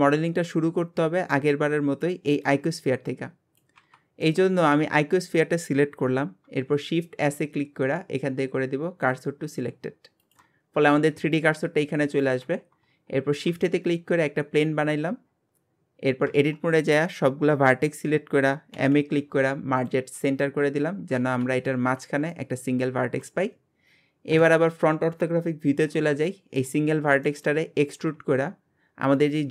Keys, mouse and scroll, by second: 4.2-7.2 middle drag, 7.2 shift+s, 12.5-13.4 scroll down 3, 13.4 shift+a, 15.2 scroll down 6, 16.3 Tab, 16.7 scroll down 3, 18.7 m, 20.2-21.2 scroll up 13, 21.2 alt+z, 21.7 scroll up 3, 24.3 KP_1, 25.9 scroll down 4, 26.3-27.6 shift+middle drag, 27.6-28.1 scroll up 1, 28.1 e, 29.4-29.5 scroll down 4.